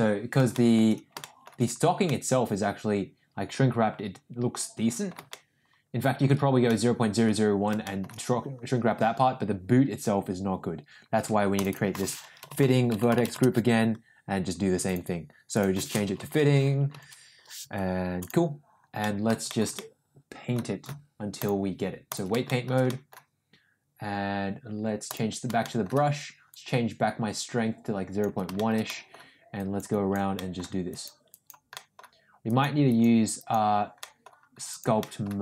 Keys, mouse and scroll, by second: 0.5 shift+middle drag, 1.1 shift+middle drag, 2.0-5.1 middle drag, 5.3-6.2 shift+middle drag, 6.7-7.3 middle drag, 7.8 shift+middle drag, 11.6 click, 11.7-13.8 shift+drag, 15.4-18.3 drag, 19.0-19.5 shift+middle drag, 19.7-20.5 middle drag, 21.4 click, 22.4 shift+middle click, 22.8 middle click, 25.0 click, 25.6 shift+middle click, 26.4-28.2 drag, 28.5 shift+middle click, 28.8 middle click, 29.6 click, 29.8 click, 30.3 middle click, 30.9 click, 31.2 click, 31.7 middle click, 32.4 click, 32.8 click, 33.3 click, 33.9 middle click, 34.6 click, 34.9 middle click.